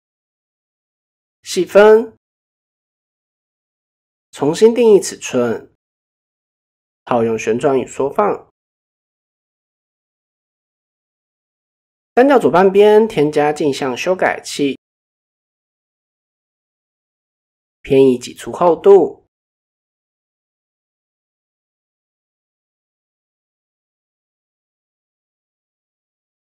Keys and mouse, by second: 0.0 click, 1.0 click, 1.1 click, 2.3 click, 3.2 click, 4.1-5.3 drag, 6.6 ctrl+a, 7.8-8.3 shift+middle drag, 8.7 click, 9.2 Tab, 9.8 click, 10.3 x, 12.0-13.9 drag, 14.8-15.5 drag, 16.2 a, 17.1 ctrl+e, 19.6 click, 20.8 click, 21.9-26.5 drag.